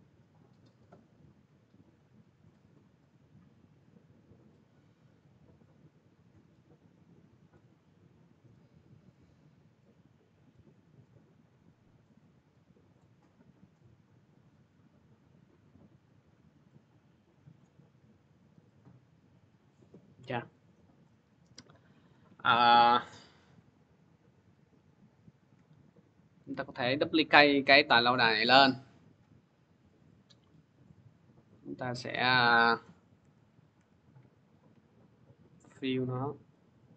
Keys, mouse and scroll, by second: 2.0 click, 2.5 click, 7.3 click, 8.5-12.4 drag, 12.8-17.9 drag, 17.9 middle click, 18.6 click, 20.3 middle click, 21.9 click, 24.6-25.3 scroll, 26.6 ctrl+d, 27.9 click, 31.4 click, 32.1 click, 33.0 Delete, 33.6 Delete, 33.7 click, 34.3 click.